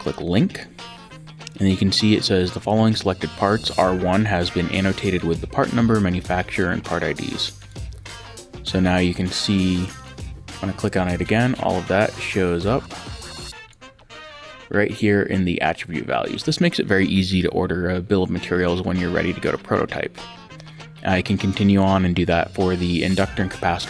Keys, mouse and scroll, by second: 0.0 click, 7.6 click, 10.0 click, 12.8 click, 20.2 click.